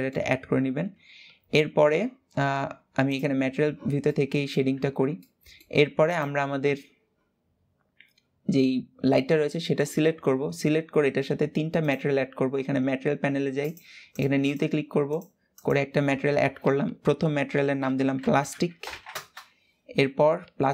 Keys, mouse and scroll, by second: 0.0-0.4 scroll up 2, 3.0 click, 3.8-4.4 middle drag, 4.4 ctrl+s, 4.9 middle click, 5.8 click, 14.9-18.8 drag, 20.6-20.7 drag.